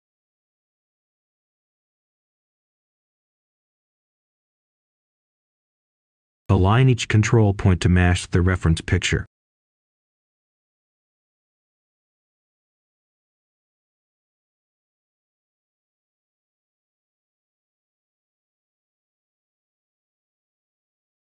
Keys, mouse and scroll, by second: 0.9-1.8 scroll up 1, 1.8 click, 2.5-3.9 scroll up 1, 3.9-5.8 drag, 6.2-6.8 scroll up 1, 6.8 click, 10.4 right click, 11.1-13.8 drag, 13.8-14.4 scroll down 1, 14.4-21.2 drag.